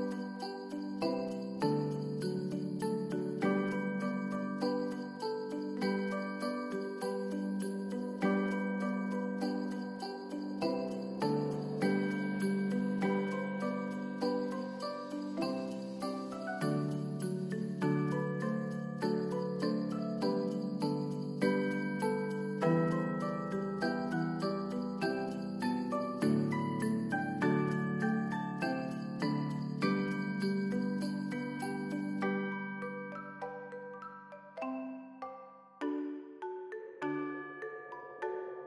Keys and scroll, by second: 0.3 space, 0.7 ctrl+s, 5.7 ctrl+s, 19.5 ctrl+s, 21.4 ctrl+s, 23.2 Return, 23.2-24.1 typing, 25.5-26.3 typing, 26.4 Return, 28.3 End, 28.4 space, 28.5 1, 28.6 Return, 29.0 ctrl+s.